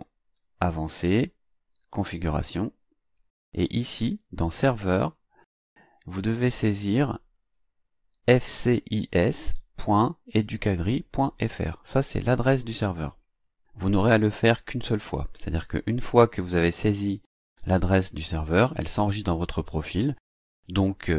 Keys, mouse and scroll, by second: 2.3 click, 5.1 click, 15.1 click.